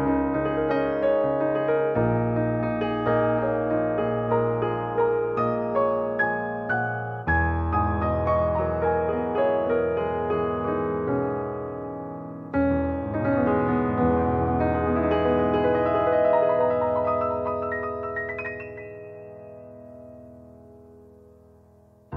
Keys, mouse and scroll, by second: 1.8-2.5 scroll down 2, 2.7 click, 3.7-6.5 drag, 6.5 middle click, 7.0-7.8 scroll down 2, 7.9 middle click, 8.8-9.1 scroll up 1, 9.1-10.2 shift+middle drag, 10.2-11.0 scroll up 1, 11.0-18.7 middle drag.